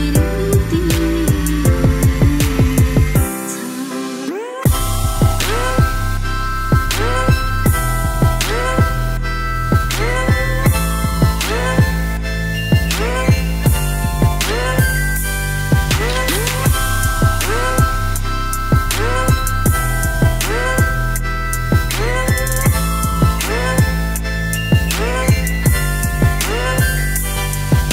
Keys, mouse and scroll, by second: 14.0 click, 15.8 click, 18.0 ctrl+scroll up 2, 18.8 ctrl+scroll up 2.